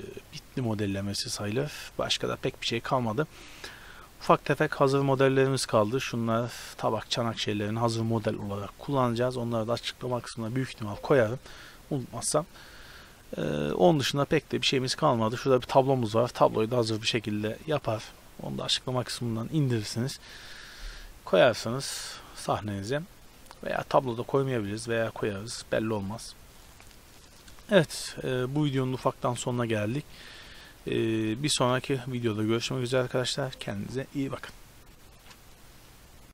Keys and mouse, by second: 3.8-6.7 middle drag, 7.3-12.0 middle drag, 14.6-17.4 middle drag, 29.2 t, 30.1 middle click, 30.4 middle click, 30.9-32.9 drag, 31.2 ctrl+s.